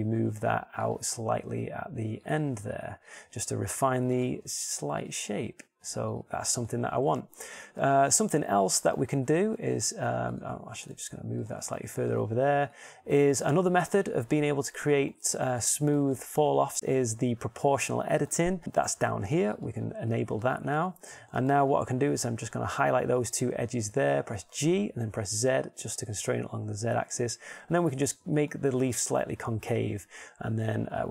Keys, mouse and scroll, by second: 1.1 g, 2.0-3.1 drag, 2.5 r, 3.5 click, 3.5 g, 5.3 g, 6.3 r, 11.9 g, 25.6 g, 29.7-31.1 middle drag.